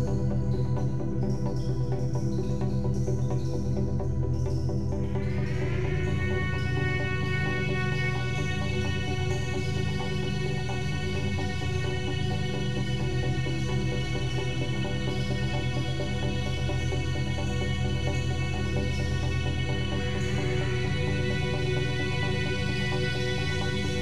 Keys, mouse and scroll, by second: 1.1 click, 2.1 g, 6.8 click, 7.3-10.4 middle drag, 11.3 click, 11.7 g, 14.2 drag, 15.0-16.3 middle drag, 16.3 click, 17.0 Tab, 17.5 scroll up 1, 18.0 middle click, 18.6 click, 19.8 3, 20.0 click, 20.6 g, 23.5 e.